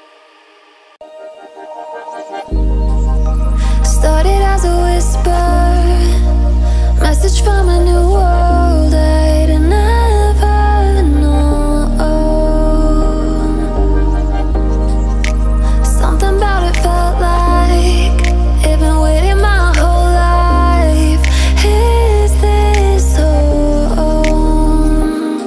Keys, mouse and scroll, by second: 0.0 click, 0.7 shift+click, 4.6 7, 5.6 click, 6.3 alt+scroll down 1, 7.0-7.6 alt+scroll up 1, 7.6-7.9 alt+scroll down 1, 7.9-8.4 alt+scroll up 1, 8.4-8.7 alt+scroll down 1, 8.7-9.2 alt+scroll up 1, 9.2-9.8 alt+scroll down 1, 11.3-11.7 alt+scroll up 1, 11.8-15.3 drag, 15.3 alt+scroll up 1, 16.0-19.0 drag, 19.0 ctrl+shift+], 19.9 click, 20.4 alt+scroll down 1, 21.8-23.2 alt+scroll up 1, 23.4 alt+scroll up 1, 24.4 click, 25.1-25.4 alt+scroll up 1.